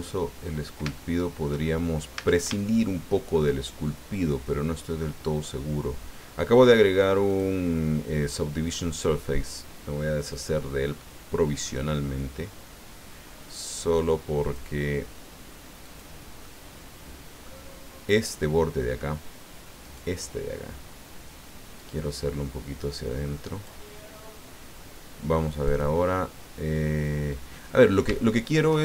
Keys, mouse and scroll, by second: 0.4-0.8 scroll up 1, 0.9 shift+click, 1.7-2.1 shift+scroll up 3, 2.2 Tab, 2.6 shift+middle click, 3.9 shift+middle click, 7.3 click, 10.3 click, 11.1-11.4 scroll down 1, 11.6-13.3 middle drag, 14.4 click, 15.8 click, 16.4-17.6 middle drag, 19.8 right click, 21.8-23.8 drag, 25.6 click, 27.5 middle click, 28.2 shift+click.